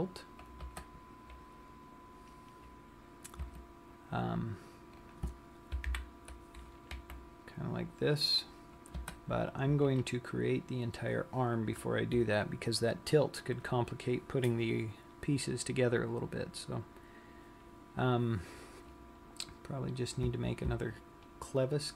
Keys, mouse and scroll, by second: 4.0 Tab, 5.7 click, 6.5 ctrl+l, 7.6 r, 20.0-21.9 scroll up 2.